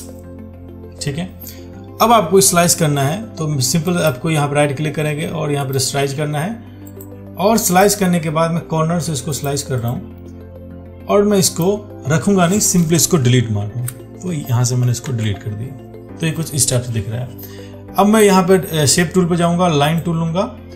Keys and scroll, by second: 15.3 ctrl+d.